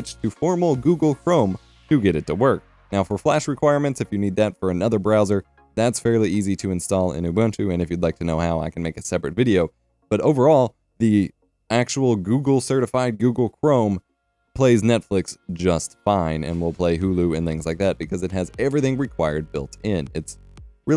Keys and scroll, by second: 0.0-0.8 typing, 2.3-4.9 typing, 3.8 F12, 5.0 F5.